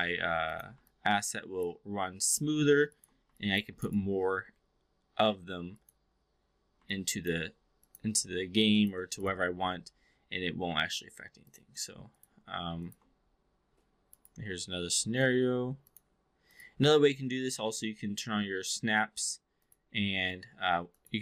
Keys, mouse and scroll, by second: 0.8-1.7 alt+drag, 2.2 click, 2.8 shift+click, 3.3 alt+click, 3.9-5.8 right drag, 6.7-7.3 alt+drag, 9.2-11.5 right drag, 12.1 click, 12.7 shift+click, 14.2-15.9 right drag, 19.6-21.1 drag.